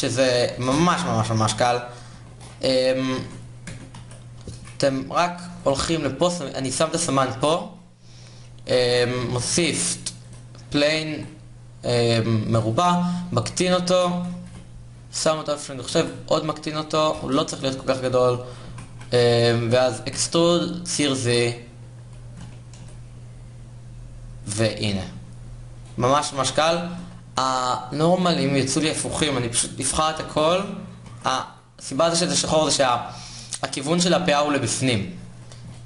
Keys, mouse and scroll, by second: 0.7 KP_3, 1.1 KP_1, 1.8 Tab, 3.7 a, 4.5 KP_7, 8.9 shift+a, 10.8 s, 13.0 s, 14.1 KP_7, 14.9 g, 15.6 s, 16.9 KP_1, 18.3 g, 19.8 e, 24.3 Tab, 25.3-29.6 drag, 30.0 a, 30.1 a.